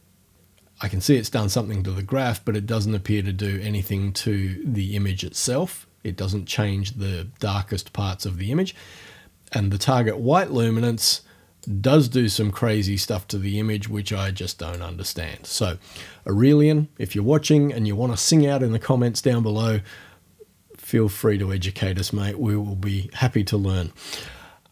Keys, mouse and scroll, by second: 3.4 click, 11.0 click, 14.2 click.